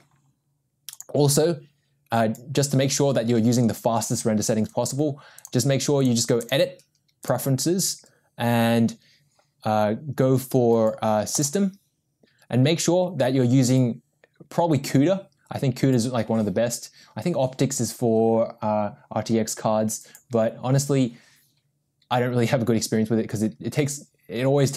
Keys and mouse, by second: 1.1-6.1 drag, 6.5-7.4 drag.